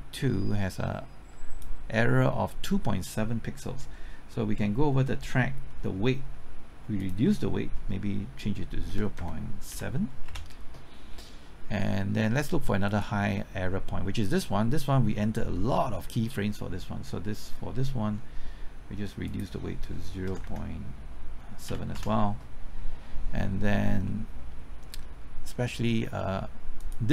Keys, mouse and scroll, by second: 5.4-7.0 scroll up 1, 7.0 click, 8.9 KP_0, 9.1 KP_Decimal, 9.7 KP_7, 10.3 KP_Enter, 12.0-12.3 scroll up 1, 12.9 click, 20.2 KP_0, 20.4 KP_Decimal, 21.6 KP_7, 21.9 KP_Enter, 24.1-25.8 middle drag, 26.8 click.